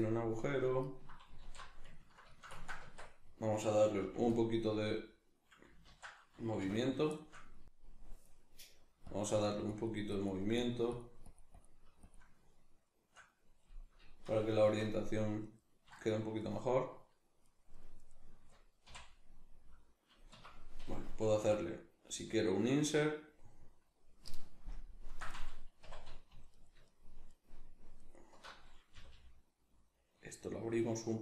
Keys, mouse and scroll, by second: 0.0 middle click, 0.8 ctrl+right click, 1.4 alt+q, 2.0-5.9 ctrl+shift+middle drag, 2.8 Tab, 4.0 f, 4.3 click, 5.9 ctrl+z, 5.9 click, 6.6 \, 7.1 shift+middle click, 7.6 click, 12.9-15.5 shift+middle drag, 14.6 Tab, 15.5 right click, 15.9 shift+right click, 16.4 shift+right click, 17.7 shift+right click, 18.0 shift+right click, 18.9 x, 20.4 Escape, 23.1 click, 24.7 ctrl+KP_Add, 25.9 2, 26.5 alt+right click, 26.9 alt+shift+right click, 27.3 alt+shift+right click, 28.0 alt+shift+right click, 28.9 g.